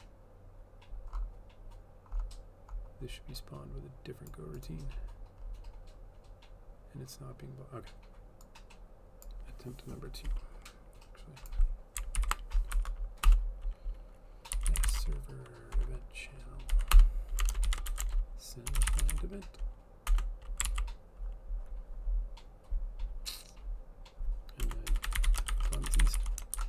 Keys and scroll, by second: 12.3 ctrl+/, 12.8 Right, 13.4 Return, 14.4-15.5 typing, 16.8 Down, 18.5-20.6 typing, 20.7 ctrl+s, 24.7 Return, 24.8-26.6 typing.